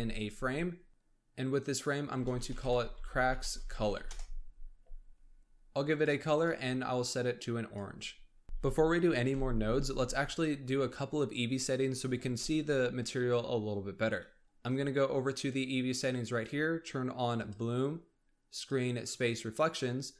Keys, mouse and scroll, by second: 0.1 click, 5.8 click, 6.3 click, 15.2 click, 17.3 click, 18.5 click.